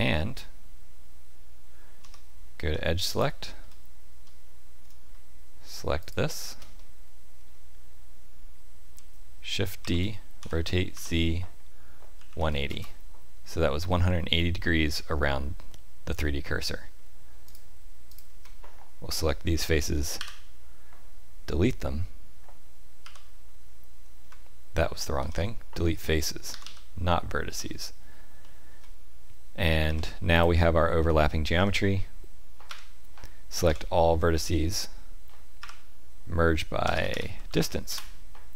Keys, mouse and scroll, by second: 1.9 3, 3.1 alt+click, 6.0 alt+shift+click, 6.7 middle click, 9.8 shift+d, 13.7-14.3 scroll down 2, 14.3 middle click, 14.3-15.8 scroll down 1, 16.4 middle click, 17.4 click, 18.0 shift+click, 20.1 Delete, 25.1 ctrl+z, 26.5 Delete, 27.5-28.2 scroll up 1, 28.2 scroll up 2, 28.4 shift+middle click, 29.8 1, 30.3 click, 31.5 g, 33.6 a, 35.6 F3.